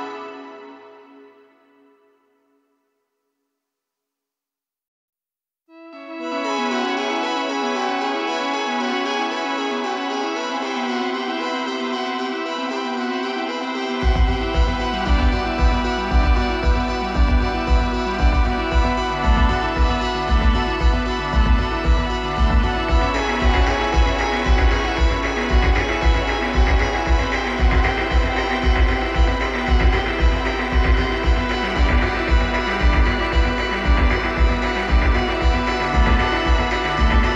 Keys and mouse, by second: 5.3-8.9 drag, 14.5-16.3 drag, 18.9-20.7 drag, 34.5-37.3 drag.